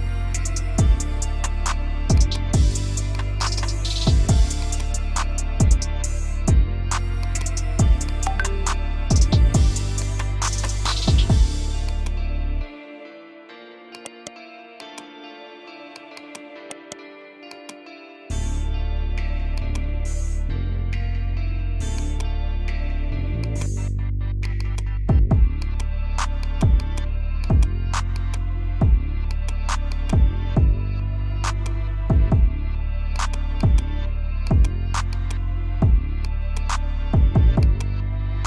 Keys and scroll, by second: 5.8 F3, 8.8 r, 9.3 Escape, 12.7 r, 13.2 Escape, 15.0 r, 15.4 Escape, 18.0 r, 18.4 F3, 19.2 Escape, 19.3 F2.